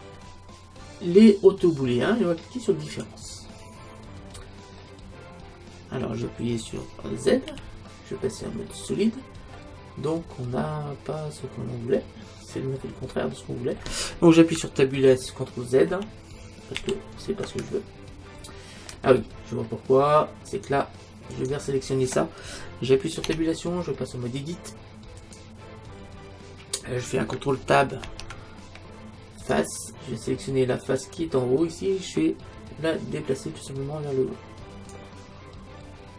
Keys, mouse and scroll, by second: 2.9-4.8 drag, 4.8-6.5 middle drag, 7.5 z, 9.6 middle click, 11.6 middle click, 16.1 ctrl+z, 16.9 ctrl+z, 17.7-19.3 middle drag, 19.4 middle click, 20.6-23.3 right drag, 23.3 Tab, 28.1 ctrl+Tab, 31.0-32.9 right drag, 33.7-35.6 drag.